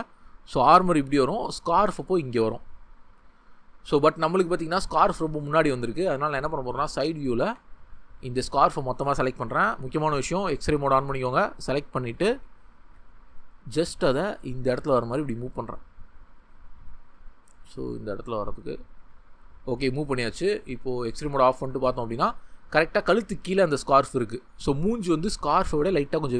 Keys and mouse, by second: 5.0 Tab, 10.4 click, 14.0 g, 15.7 click, 17.0 g, 18.3 click, 19.8 Tab, 23.8 Tab.